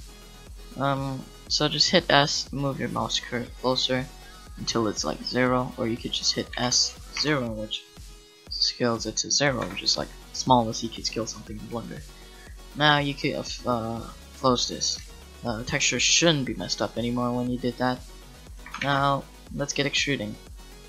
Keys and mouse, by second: 6.5 s, 9.6 Tab, 14.1-16.0 drag, 18.6 a.